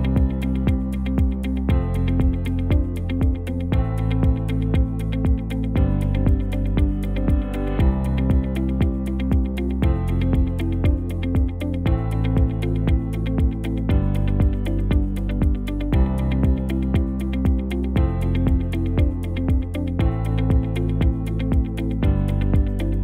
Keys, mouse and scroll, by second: 6.0 shift+a, 12.8 ctrl+t.